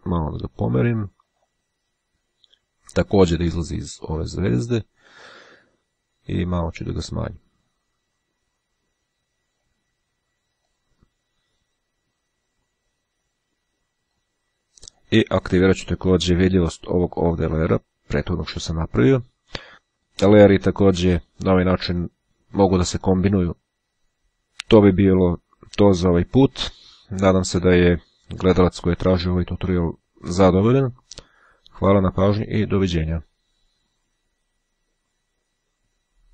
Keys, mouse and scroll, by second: 1.5 click, 2.5-5.7 drag, 6.4 click, 7.5-10.2 drag, 10.8 click, 13.1 click, 14.3-15.6 drag, 16.4-18.4 drag, 19.9 click.